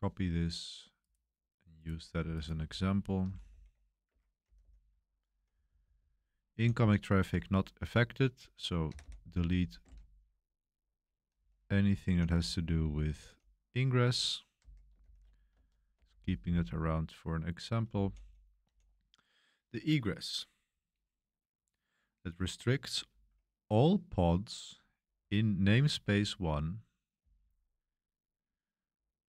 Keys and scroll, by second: 3.2-7.6 typing, 3.5 super+v, 4.1 Escape, 8.7-12.9 typing, 14.3-18.4 typing, 20.7 typing, 24.4-26.0 typing, 27.2-27.5 typing.